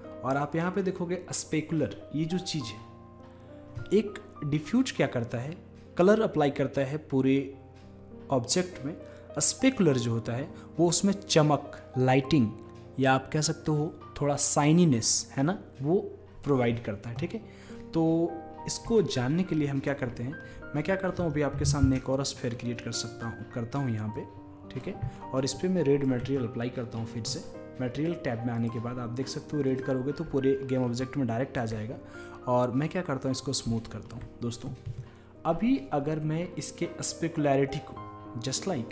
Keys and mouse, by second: 19.7-21.6 middle drag, 21.6 shift+a, 24.2-27.4 drag, 27.4-28.7 middle drag, 28.7-30.4 drag, 31.1-35.1 drag, 35.1-38.9 middle drag.